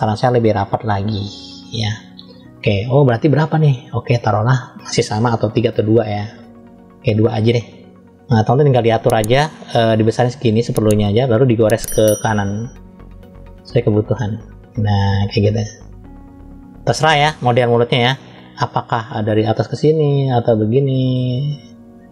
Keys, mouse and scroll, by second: 0.7 click, 3.4-6.8 drag, 9.7 f, 12.1 click, 17.7 ctrl+z, 19.1 click.